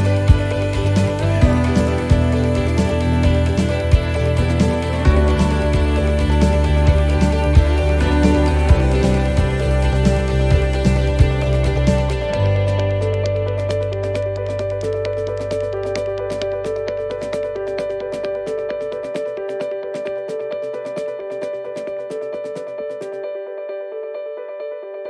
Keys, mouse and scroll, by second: 0.3-1.2 scroll down 6, 1.2 shift+middle click, 1.8 middle click, 2.2-2.6 scroll up 4, 3.0 shift+middle click, 4.9 shift+right click, 5.7 shift+right click, 7.1 middle click, 7.5-8.1 scroll down 4, 9.4 e, 17.9 ctrl+r, 19.5 s, 22.4 ctrl+r, 23.4 s.